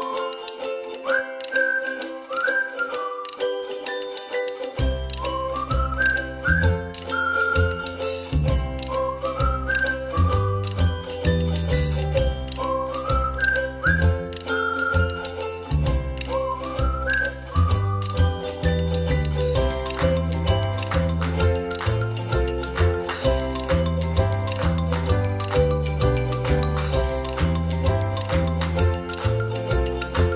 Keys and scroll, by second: 1.2 8, 4.1 space, 6.6 ctrl+-, 6.8 ctrl+-, 7.1 ctrl+-, 7.5 ctrl+=, 10.9 space, 24.3 ctrl+-, 24.6 ctrl+-, 24.8 ctrl+-, 25.0 ctrl+=, 25.2 ctrl+=.